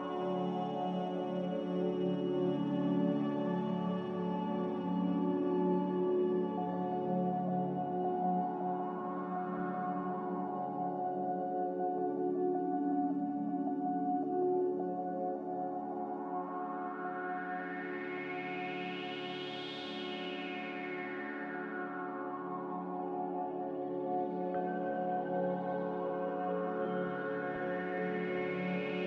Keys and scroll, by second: 16.3 z, 20.2-20.9 typing, 20.5 Return, 23.6 1, 23.7 0, 24.1 Return.